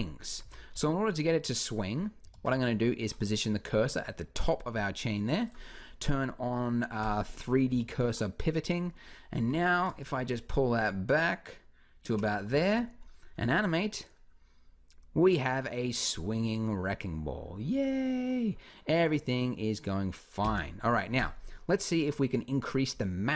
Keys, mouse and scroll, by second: 0.2 a, 0.5 z, 2.1 shift+s, 7.5 b, 9.1 r, 12.4 alt+a, 13.2 z, 20.2 Escape, 21.0-22.7 drag.